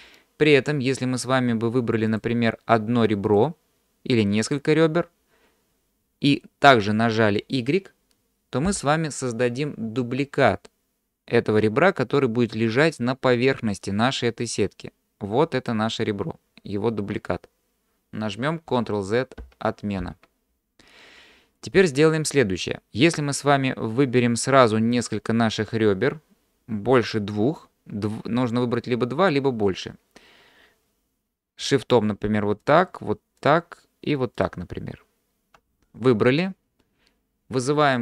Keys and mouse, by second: 2.1 click, 3.3 click, 8.7 y, 14.6-15.7 drag, 18.7 ctrl+z, 19.4 ctrl+z, 25.0 click, 32.6 shift+click, 33.4 shift+click.